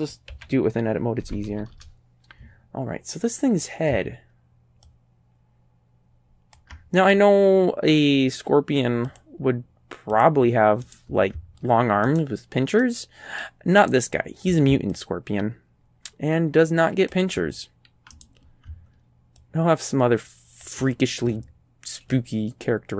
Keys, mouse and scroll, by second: 0.3 s, 1.2 KP_Decimal, 1.5 KP_5, 1.8 KP_Enter, 4.9-6.8 ctrl+drag, 7.2-7.8 scroll down 4, 9.1 click, 10.2 click, 10.9 right click, 12.1 right click, 12.8 click, 13.5 right click, 13.8 right click, 15.0-17.3 ctrl+drag, 18.2 right click, 19.4-20.8 ctrl+drag, 22.1-22.9 middle drag.